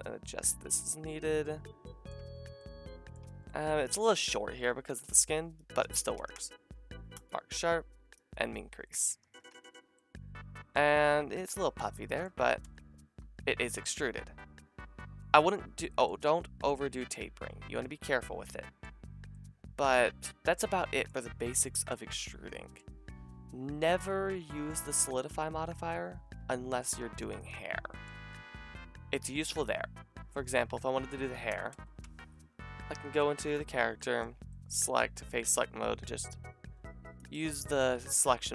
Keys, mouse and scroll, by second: 1.0 a, 2.0 click, 2.2 Tab, 2.3 middle click, 3.2 Tab, 6.1 ctrl+e, 8.3-12.7 drag, 9.2 a, 9.5 Tab, 13.4-26.4 drag, 13.4 a, 26.4-27.0 shift+middle drag, 27.2 scroll up 2, 30.3 shift+d, 32.0 Tab, 33.5-37.9 middle drag, 35.0 c, 38.0 c.